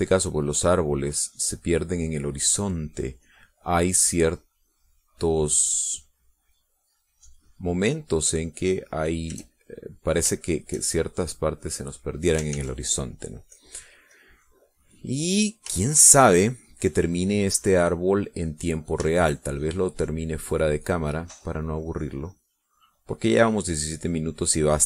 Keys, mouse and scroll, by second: 0.7-10.8 drag, 11.1-13.5 drag, 13.8 ctrl+s, 14.8 click, 15.4 click, 15.9 middle click, 16.5 middle click, 17.2 shift+click, 19.7 click, 20.3 shift+click, 20.8-24.8 shift+drag.